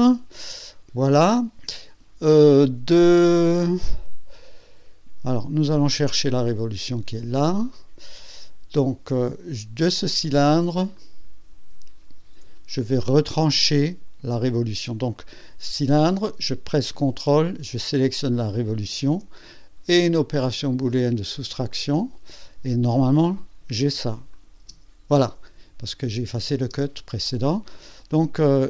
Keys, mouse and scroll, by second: 0.4-2.0 drag, 5.5 click, 6.4 click, 10.9 click, 18.5 ctrl+click, 21.3 click, 24.3 click, 24.6 space, 26.0 space, 27.2 click, 28.5 scroll up 1.